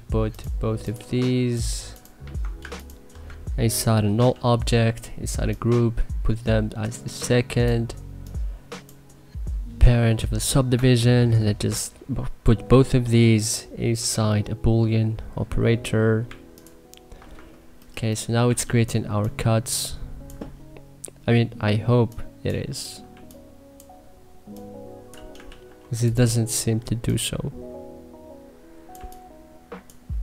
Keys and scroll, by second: 3.9 alt+g, 18.3 2, 22.9 3, 25.3 ctrl+z, 28.8 3.